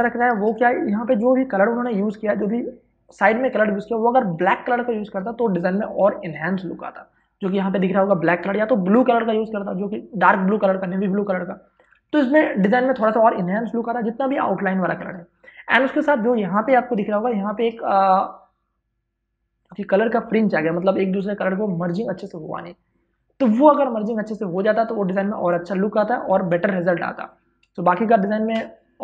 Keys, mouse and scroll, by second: 0.9 i, 12.0 space, 12.2 ctrl+click, 16.5 space, 16.7 ctrl+click, 27.9 space, 28.1 ctrl+click.